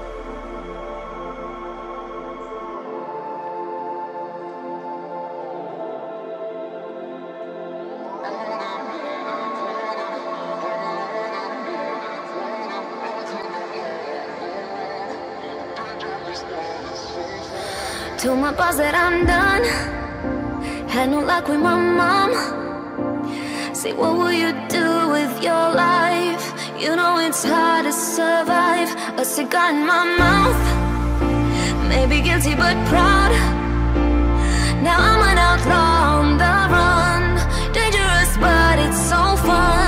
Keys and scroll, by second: 4.9 ctrl+j, 34.7 ctrl+d.